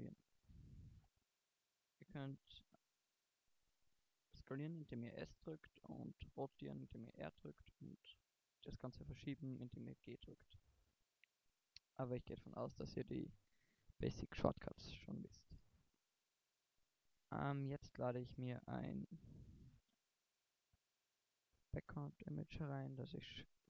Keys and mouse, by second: 3.4-4.6 drag, 4.6 s, 6.3 r, 8.3 g, 16.3 Tab, 17.4 KP_1, 19.0 n.